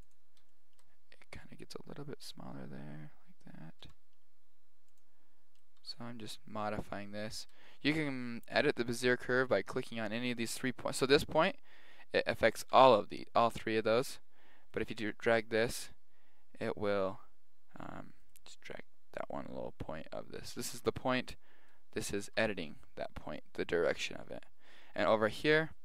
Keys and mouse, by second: 0.5 middle click, 2.0 middle click, 2.3-3.5 middle drag, 3.8 g, 5.6 right click, 5.8 g, 7.3 middle click, 9.5 right click, 12.7 g, 14.7 right click, 15.0 g, 20.5-23.9 right drag, 20.7 g, 22.2 g.